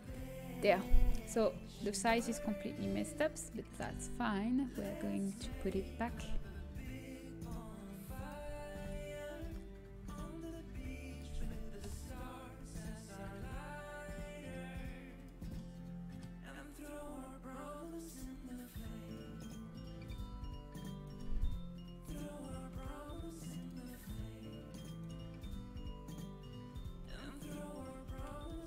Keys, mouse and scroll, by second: 2.8 KP_7, 3.8 s, 5.6 KP_Decimal, 7.8 z, 7.8 s, 9.3 KP_Decimal, 9.9 s, 13.6 z, 16.2-17.3 drag, 18.1 s, 21.0 right click, 21.0 h, 23.4 h, 24.9 click, 24.9-28.5 right drag, 28.5 KP_3.